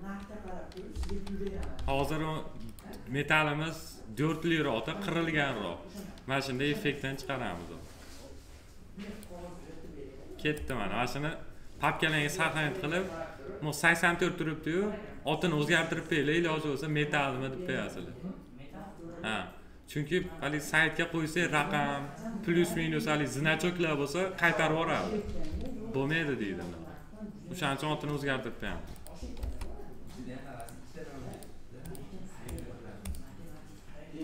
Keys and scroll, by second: 0.9 d, 29.3 ctrl+c.